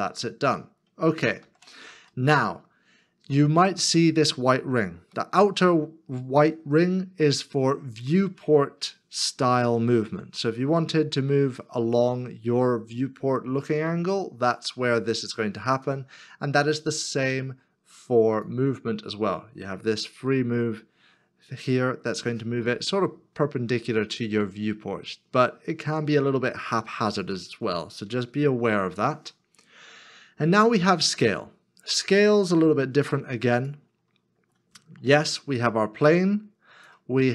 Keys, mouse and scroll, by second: 1.2 ctrl+z, 1.4 ctrl+z, 2.2 middle click, 28.3 ctrl+z, 30.5 ctrl+z, 34.7 ctrl+z, 36.1-36.7 scroll down 1.